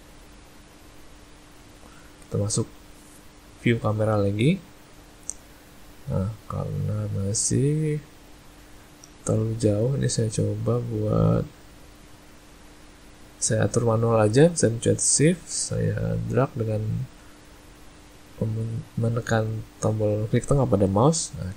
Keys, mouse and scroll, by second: 9.4 click, 15.4 shift+middle click.